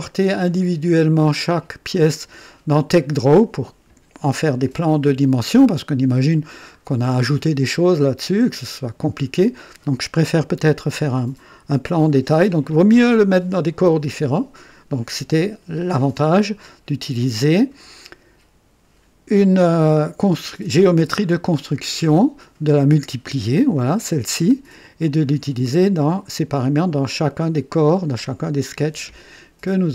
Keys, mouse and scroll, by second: 6.6 scroll up 1, 7.1 right click, 23.2 click, 25.2 click.